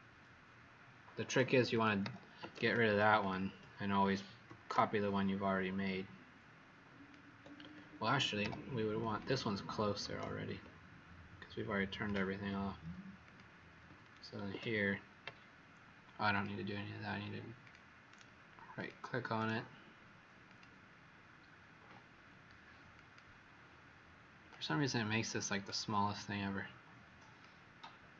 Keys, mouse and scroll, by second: 1.7 click, 2.0 Delete, 3.1 click, 4.6 alt+click, 8.3 Delete, 9.1 click, 10.1 alt+click, 13.2 click, 14.3 ctrl+d, 16.3 click, 18.0 right click, 18.7 click, 19.3 right click, 20.4 click.